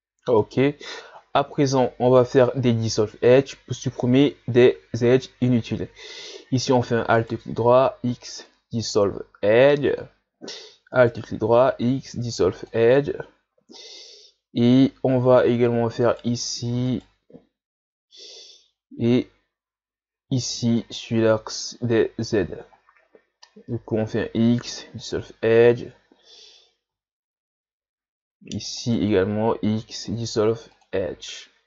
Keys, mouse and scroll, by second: 0.4 right click, 1.9 shift+scroll up 1, 4.4 shift+scroll up 3, 7.2 alt+right click, 8.1 x, 11.0 alt+right click, 11.7 x, 13.8 shift+scroll down 1, 14.3 scroll up 1, 16.0 alt+right click, 16.9 alt+right click, 20.8 alt+right click, 23.9 x, 28.8 alt+right click, 29.8 x.